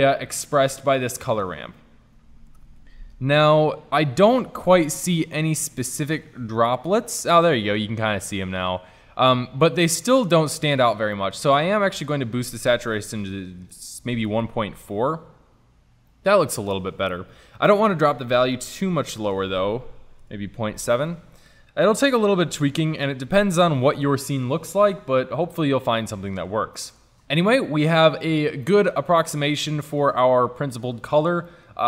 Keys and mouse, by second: 2.7 KP_0, 7.5-7.9 drag, 8.1 click, 12.1-13.8 drag, 15.1 click, 15.1 middle click, 15.3-18.8 middle drag, 18.8-20.4 drag, 20.6 middle click, 21.6 middle click, 21.8-26.8 middle drag, 30.1-31.8 drag.